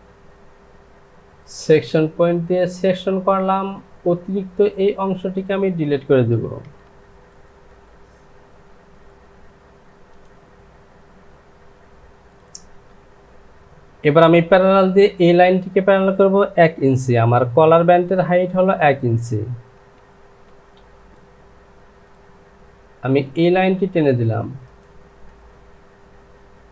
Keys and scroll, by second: 7.0 Delete, 7.0 Insert, 18.3 Down, 19.8 KP_1, 20.5 Return.